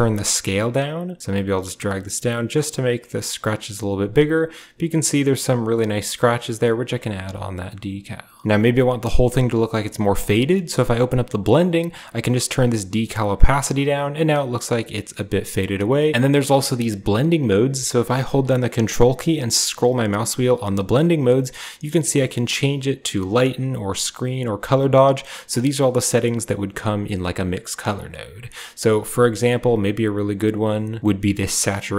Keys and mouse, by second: 0.3-5.1 shift+drag, 10.6 click, 11.5-13.5 drag, 14.6 click, 15.5 click.